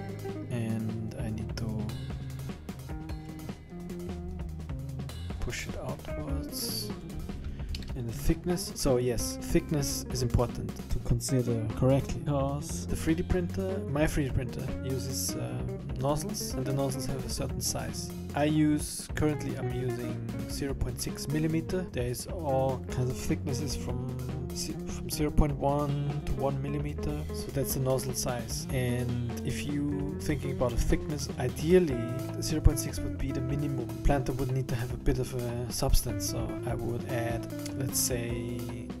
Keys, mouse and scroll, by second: 3.3 click, 5.3 scroll up 6, 5.5-7.0 scroll down 7, 7.0 click, 31.3 scroll down 7, 31.4 middle click.